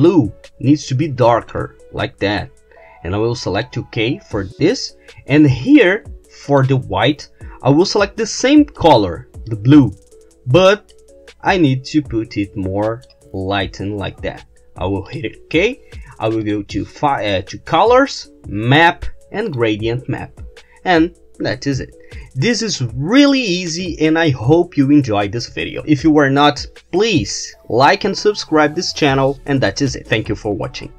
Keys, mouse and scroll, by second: 3.6 click, 6.5 click, 8.8 click, 9.5-10.9 drag, 11.0-13.3 drag, 15.1 click, 16.4 click, 19.5 click.